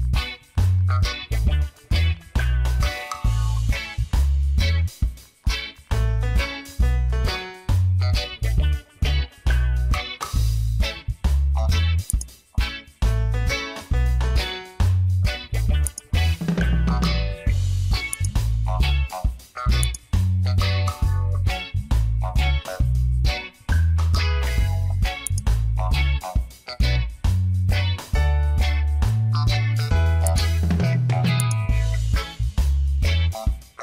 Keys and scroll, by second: 1.5 space, 3.3 space, 4.7 space, 5.8 space, 7.4 space, 8.3 ctrl+alt+z, 15.8 space.